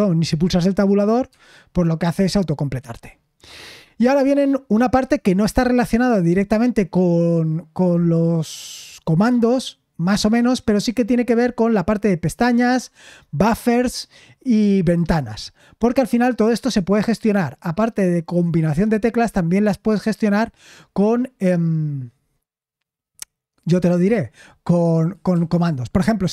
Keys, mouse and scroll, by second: 14.2-15.0 scroll down 1, 15.0-17.0 scroll down 1, 17.0-18.5 scroll down 1, 18.5-20.1 scroll down 1, 20.1-23.5 scroll down 1, 23.5-25.1 scroll down 1.